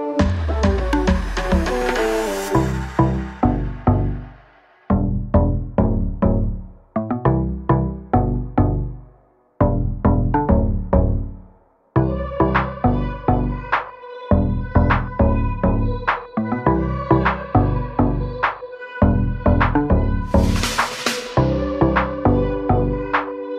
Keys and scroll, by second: 6.2 Escape, 7.9 p, 9.0 space, 13.7 m, 14.2 Right, 16.9 space, 20.1 l, 22.9 space.